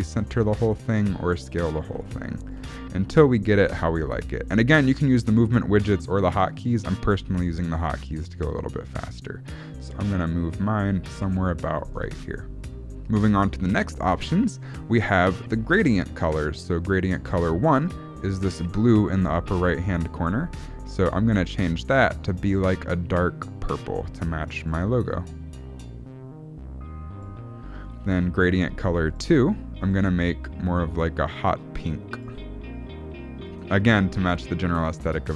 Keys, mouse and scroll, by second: 1.1 s, 1.9 g, 2.6 g, 12.2-12.8 scroll down 5, 12.8 shift+middle click, 13.8 scroll down 1, 17.3 click, 21.0 click, 29.1 click, 29.9 click, 35.0 click.